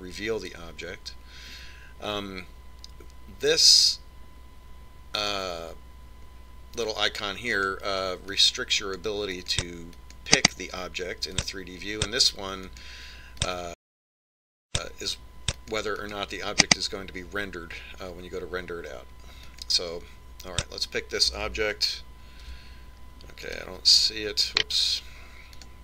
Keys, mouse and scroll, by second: 9.5-18.7 drag, 20.5 click, 23.5 g, 24.5 right click.